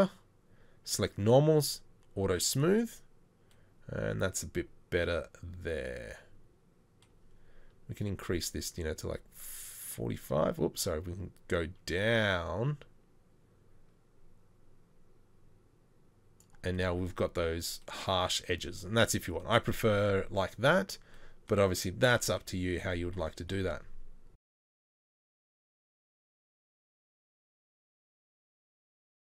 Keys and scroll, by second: 18.8 Tab, 19.2 Tab.